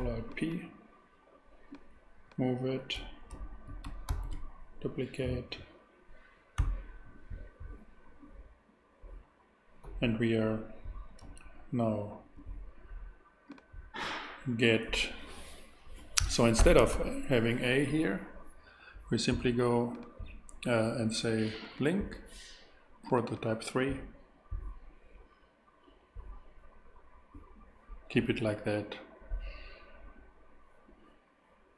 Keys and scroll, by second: 4.1 alt+shift+d, 6.6 x, 16.9 shift+a.